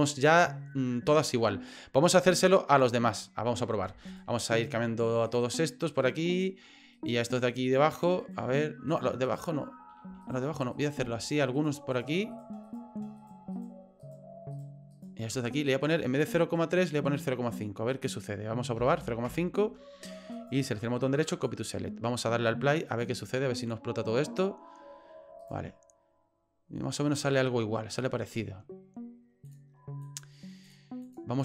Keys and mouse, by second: 0.1 right click, 4.1 shift+right click, 4.6 shift+right click, 5.3 shift+right click, 5.6 shift+right click, 6.0 shift+right click, 6.3 shift+right click, 7.0 shift+right click, 7.3 shift+right click, 8.0 shift+right click, 8.2 shift+right click, 8.9 shift+right click, 9.2 shift+right click, 10.2 right click, 10.7 right click, 11.2 shift+right click, 11.6 shift+right click, 11.9 shift+right click, 12.3 shift+right click, 12.7 shift+right click, 13.2 shift+right click, 13.5 shift+right click, 14.0 shift+right click, 14.5 shift+right click, 14.9 shift+right click, 16.3-19.6 drag, 20.4 right click, 22.9 click, 25.4 right click, 29.5 click, 30.2 click, 30.6 click, 31.1 click.